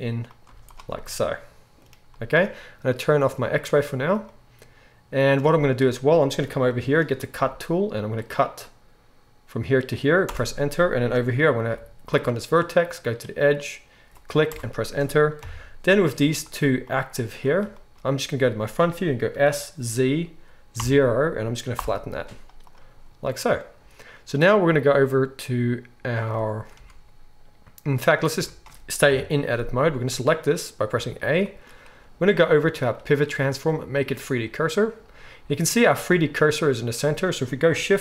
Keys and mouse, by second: 0.4 z, 3.3-38.0 drag, 7.3 k, 11.6 k, 15.4 KP_1, 16.1 z, 19.3 s, 22.2 z, 26.7 Tab, 28.3 Tab, 29.0 KP_7, 30.9 a.